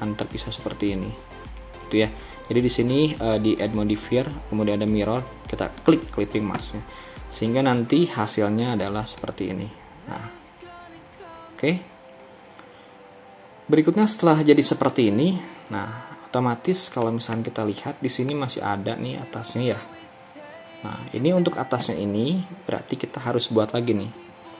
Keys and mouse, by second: 1.6 ctrl+z, 9.2-14.2 middle drag, 15.0-17.1 middle drag, 17.8 middle click, 24.2 KP_1.